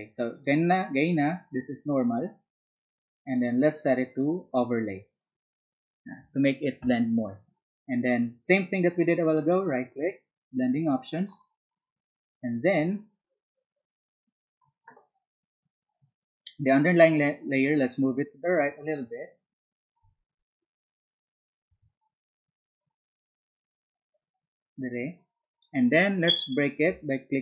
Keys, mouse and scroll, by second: 17.6-25.6 ctrl+drag.